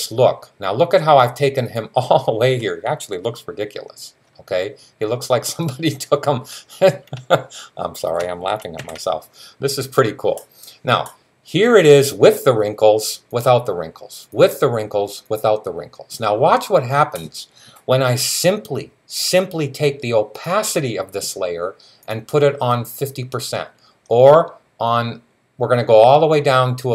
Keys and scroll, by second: 8.6 super+s.